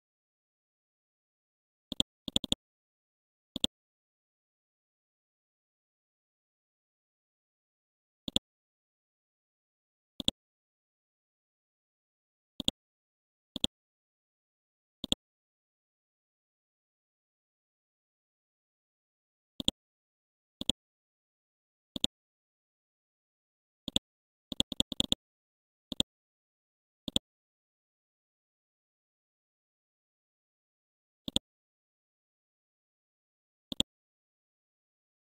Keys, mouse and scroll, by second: 0.3-0.9 scroll down 1, 1.9-4.8 drag, 5.0-5.5 scroll up 1, 5.8 Home, 8.3 click, 9.1-10.2 scroll up 1, 10.2 click, 11.5 scroll down 1, 12.6 shift+click, 12.9 typing, 13.6 click, 14.1-15.0 scroll up 1, 15.0 click, 15.3-16.1 typing, 17.5-18.8 scroll down 1, 19.6 click, 21.0-21.6 scroll up 1, 21.9 shift+click, 22.8-23.1 scroll down 1, 23.9 click, 26.1-28.6 drag, 28.7 scroll up 1, 29.6 Home, 31.3 click, 31.8-32.6 scroll down 1, 32.6 scroll up 1, 33.7 click, 34.5 ctrl+z.